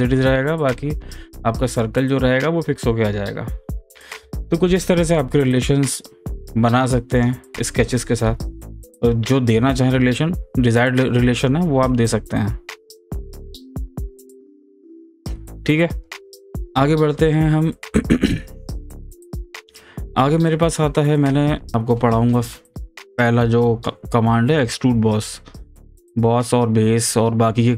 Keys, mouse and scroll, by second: 6.5-9.6 drag, 13.7 click, 13.7 f.